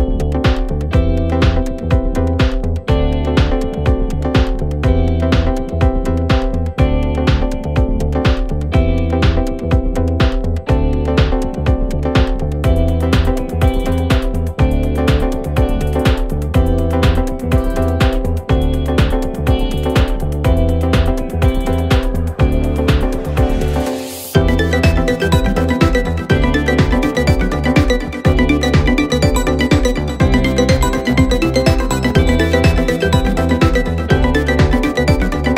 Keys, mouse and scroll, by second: 0.4 KP_3, 1.1 e, 3.0 middle click, 3.6 f, 4.5 click, 4.6 scroll up 1, 4.7 middle click, 5.2 scroll down 1, 5.3 a, 5.9-6.6 drag, 6.6 ctrl+a, 8.0-9.5 middle drag, 10.3-12.1 drag, 12.1 KP_7, 12.4 click, 13.1 click, 14.2-15.7 middle drag, 16.6 click, 18.5-20.8 drag, 21.0-22.1 drag, 23.5-26.7 drag, 28.9 click, 30.1 click, 30.8-32.2 drag, 32.2 middle click, 32.8-34.4 drag.